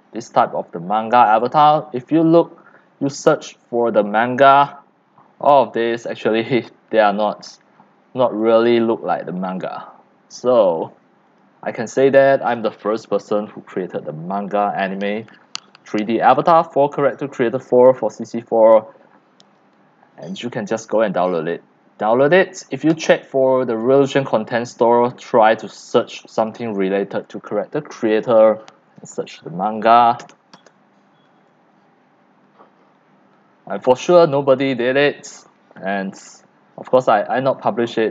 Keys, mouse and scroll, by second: 0.8-1.4 scroll down 1, 1.4 scroll up 10, 1.4 scroll down 1, 1.5 click, 2.0 scroll down 3, 4.1 scroll up 1, 4.2-6.5 scroll down 15, 6.9-8.1 scroll down 11, 8.7-11.6 drag, 12.1-14.6 drag, 19.6 click, 20.2-23.0 right drag, 23.0-25.8 drag, 26.9 click, 27.4 right click, 28.2 right click, 28.3 click, 28.8-30.9 typing, 32.8-35.0 scroll down 5, 35.0-38.1 drag.